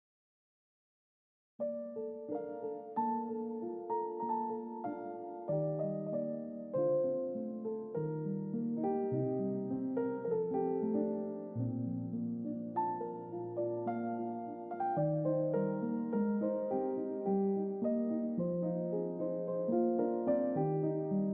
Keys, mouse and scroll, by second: 2.2-4.1 drag, 8.7 click, 10.9 click, 12.0-13.5 drag, 14.7 click, 17.7 click, 18.8 click, 21.2 click.